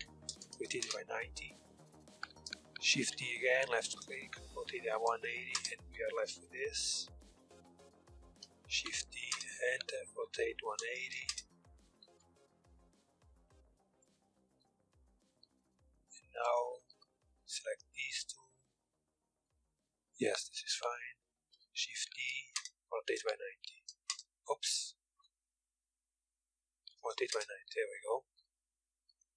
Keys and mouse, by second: 0.7 a, 1.4 a, 2.5 shift+d, 4.1 r, 6.0 KP_3, 6.5 a, 6.8 a, 7.1-9.7 drag, 8.4 shift+d, 9.7 r, 11.2 a, 11.9 z, 12.0 b, 14.2-15.7 drag, 15.3 a, 15.7 middle click, 16.0 KP_1, 16.4 z, 16.8 b, 17.9 z, 19.0 KP_3, 20.4 KP_7, 21.4 shift+d, 23.6 r, 24.0 ctrl+z, 24.5 shift+s, 26.3 r, 27.6 z, 28.0 z.